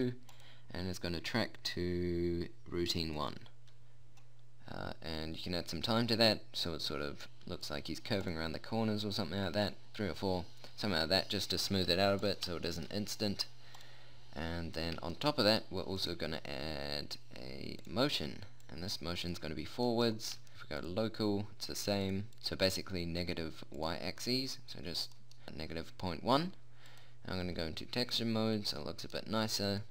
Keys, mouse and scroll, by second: 11.5-13.3 middle drag, 24.3-28.6 drag, 28.6 right click, 29.3 click.